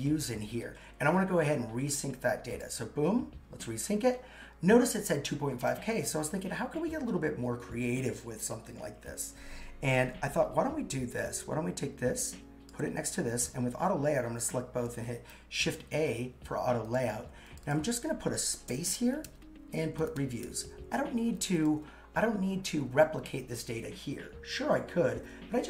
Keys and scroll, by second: 15.3 shift+a.